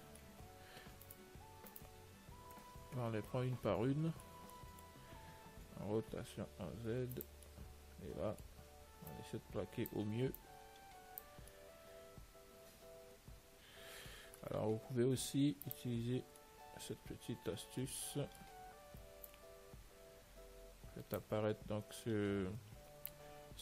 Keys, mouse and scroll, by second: 1.5-3.7 right drag, 3.3 middle click, 3.6 middle click, 3.8-7.4 middle drag, 6.2 r, 7.7-9.4 middle drag, 9.4-12.5 drag, 12.4-13.7 middle drag, 13.9-15.8 middle drag, 15.9 click, 16.7-18.6 middle drag, 19.6 click, 23.4-23.6 middle drag.